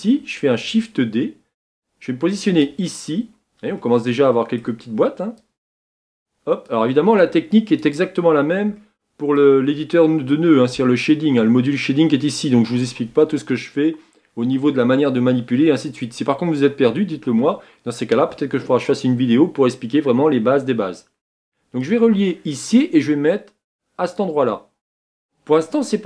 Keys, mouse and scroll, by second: 0.7 shift+d, 24.2-26.0 drag.